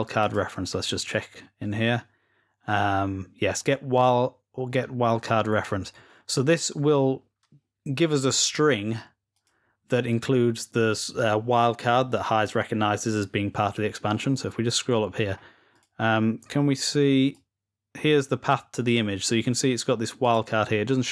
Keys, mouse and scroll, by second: 0.0 click, 3.5 click, 8.1-8.7 drag, 9.1 click, 13.6-14.6 scroll up 4, 14.8-15.5 scroll down 2, 15.5 click, 16.0 click, 16.2 click, 16.4 click, 17.1-18.6 drag, 19.0 click, 19.2 click, 20.0 click.